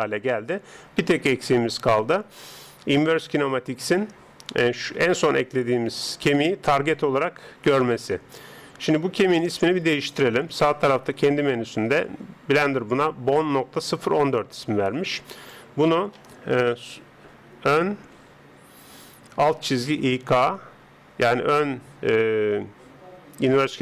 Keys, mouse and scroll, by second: 15.4 click.